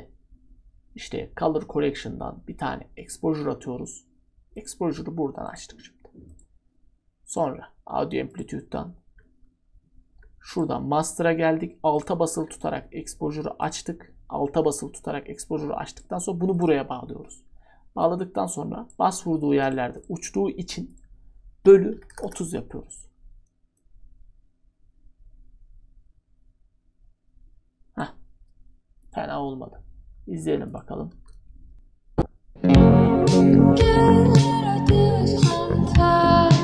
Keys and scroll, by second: 21.4-22.6 typing.